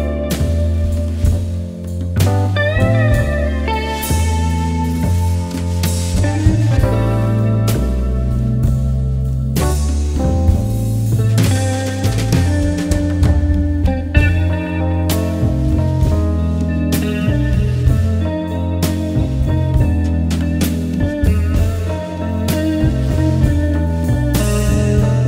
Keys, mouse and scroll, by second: 0.0-0.3 typing, 0.5 click, 6.1-6.6 typing, 7.0 click, 14.3-15.2 typing, 15.2 click, 20.2 click, 23.8 click.